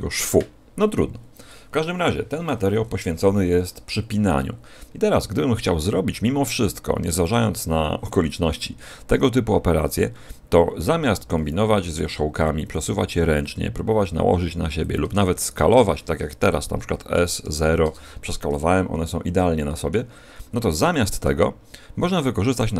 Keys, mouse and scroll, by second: 12.6 right click, 12.8 g, 14.8 click, 15.3 shift+right click, 17.0 s, 18.8-19.5 scroll up 3, 19.5 middle click, 20.2-20.8 scroll up 1, 20.8 middle click, 20.8-21.4 scroll up 1.